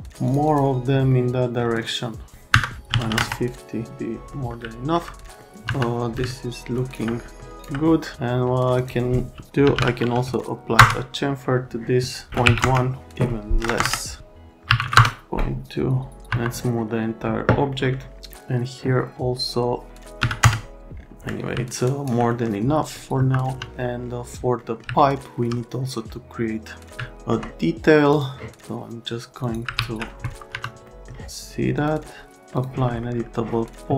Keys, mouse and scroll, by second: 0.2 click, 0.4 click, 1.1 middle click, 2.5 KP_Subtract, 2.9 KP_5, 3.0 KP_0, 4.3 middle click, 4.6 alt+middle click, 5.4 middle click, 5.6 F3, 6.3 alt+middle click, 6.8 alt+right click, 7.2 middle click, 7.5 alt+middle click, 7.9 middle click, 8.1 F3, 8.7 click, 9.4-10.4 typing, 10.8 Return, 12.4 KP_1, 12.6 KP_Enter, 13.6 KP_0, 13.7 KP_Enter, 14.7 Delete, 14.8 1, 16.2 F3, 17.7 middle click, 20.2 KP_3, 21.3 middle click, 22.3 middle click, 23.1 F3, 23.5 F3, 25.0 right click, 27.0 right click, 28.1 click, 29.4 click, 29.7 alt+1, 30.5 F3, 30.8 right click, 31.8 click, 32.5 click, 33.0 right click.